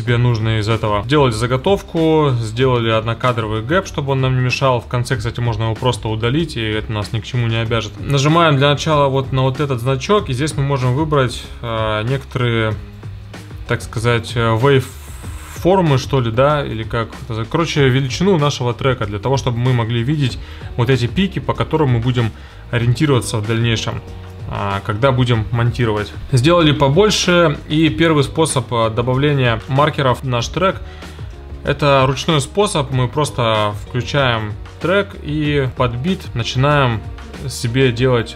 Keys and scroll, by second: 2.6 1, 3.2 Return.